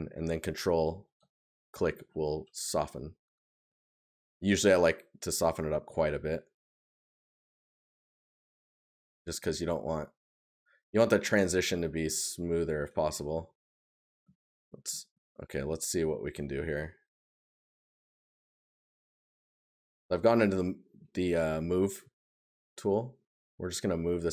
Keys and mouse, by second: 5.3 right click, 7.4 right click, 10.4 right click, 12.9 right click.